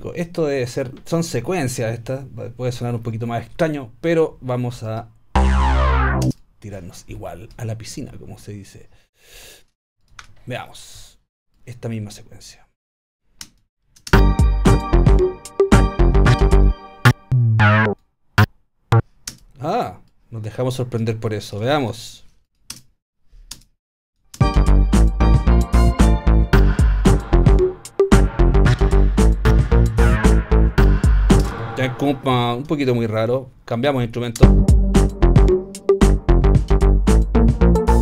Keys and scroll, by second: 6.3 space, 10.2 BackSpace, 14.1 alt+space, 15.1 space, 19.3 space, 21.8 BackSpace, 22.7 space, 31.5 space, 34.4 space.